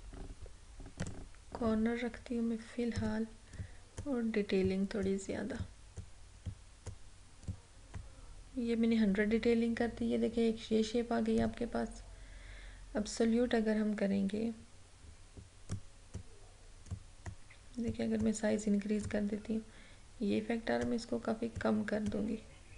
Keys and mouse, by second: 11.5 click, 15.8-22.7 drag.